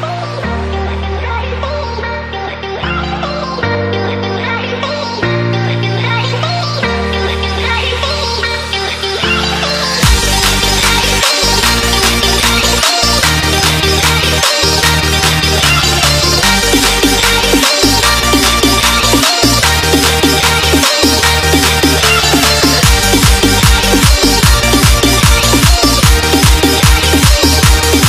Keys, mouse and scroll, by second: 2.2 Return, 5.6 click, 12.5 Delete, 13.2 click, 13.7 click, 17.3 Return, 17.9 click, 20.3 ctrl+c, 21.0 ctrl+v, 21.7 click, 24.1 ctrl+s, 25.3 click.